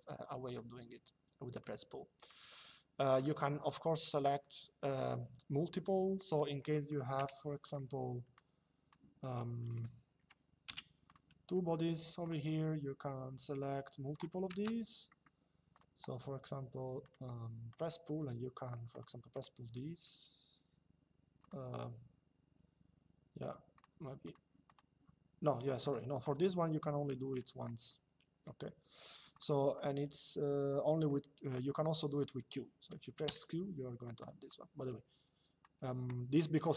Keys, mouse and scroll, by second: 0.1 click, 1.3 click, 6.0 click, 6.9 m, 7.4 click, 9.8 Escape, 10.4 m, 10.8 click, 11.9 click, 13.3 click, 14.8 middle click, 16.7 click, 18.6 click, 21.1 click, 23.4 click, 25.6 click, 27.0 click, 29.0 click, 30.8 click, 32.7-33.5 typing, 35.5 Escape.